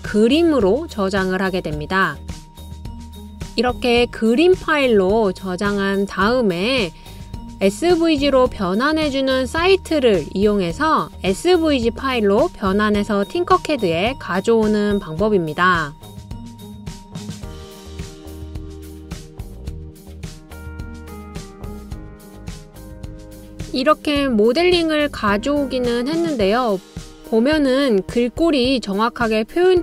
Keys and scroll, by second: 4.2-5.0 typing, 19.5-20.3 typing, 23.1-23.8 typing.